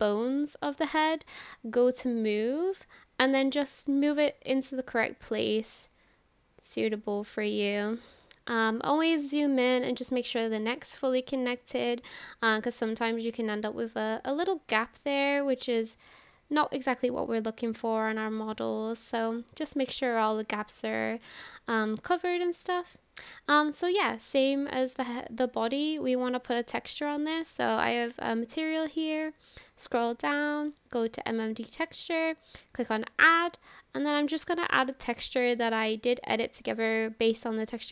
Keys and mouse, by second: 0.4-0.8 shift+drag, 0.8 middle click, 2.3 click, 4.2-6.7 drag, 7.2-7.6 shift+middle drag, 7.9-8.3 middle drag, 8.7-9.0 shift+middle drag, 9.4-10.1 middle drag, 10.4-10.8 shift+middle drag, 11.0-14.4 middle drag, 14.8-18.5 middle drag, 19.5-20.1 middle drag, 20.6-21.0 middle drag, 21.9 shift+middle drag, 22.2 click, 25.0-25.3 drag, 32.0 click.